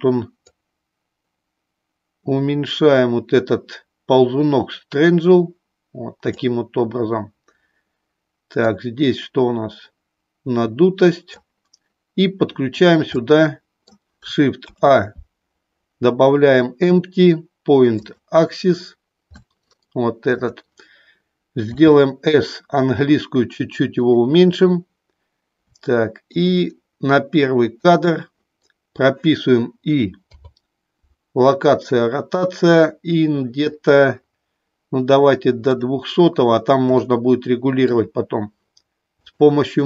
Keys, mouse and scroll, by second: 0.5-6.3 drag, 8.8-11.4 drag, 13.3 middle click, 14.7 shift+a, 19.4-20.5 shift+middle drag, 21.7 s, 25.8 shift+middle click, 35.8 click, 37.1 shift+middle click, 39.2 click.